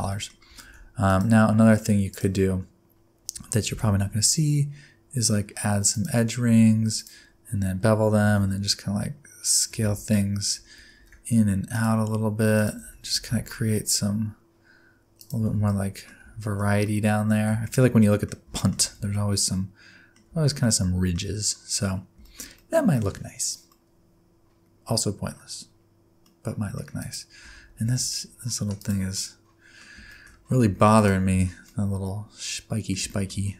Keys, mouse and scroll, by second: 0.1 middle click, 0.6 ctrl+r, 3.7 ctrl+b, 6.5 1, 6.9 alt+click, 8.2 s, 9.8 alt+z, 10.9 ctrl+r, 12.8 alt+z, 13.1 s, 15.5 Tab, 15.7 middle click, 16.2-16.8 scroll down 3, 16.4 shift+middle click, 16.8 middle click, 17.6-18.0 shift+scroll down 2, 17.6 shift+middle click, 18.0 middle click, 18.5 shift+middle click, 18.8 shift+scroll down 1, 19.0 alt+z, 19.1 middle click, 20.3 alt+z, 20.6 middle click, 21.2-21.9 scroll up 3, 21.9 scroll down 4, 22.2 shift+middle click, 22.5-23.7 scroll down 4, 22.6 middle click, 23.7 middle click, 24.9-26.2 scroll up 8, 26.2 middle click, 27.0 click, 27.5 Tab, 27.8 alt+z, 28.8 click, 29.2 middle click, 30.1 shift+middle click, 30.4 scroll up 1, 30.7 3, 30.9 click, 31.3 alt+z, 31.6 middle click, 33.1 middle click, 33.4-33.5 scroll up 4.